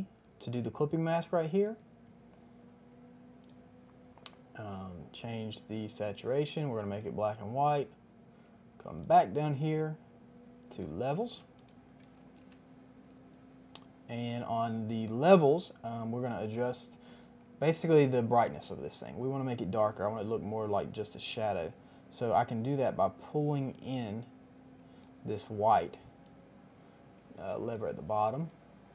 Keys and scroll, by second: 12.2 ctrl+alt+g.